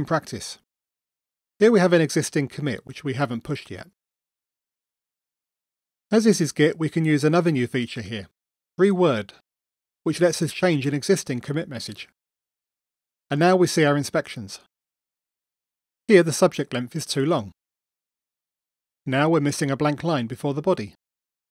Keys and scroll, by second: 1.1 super+9.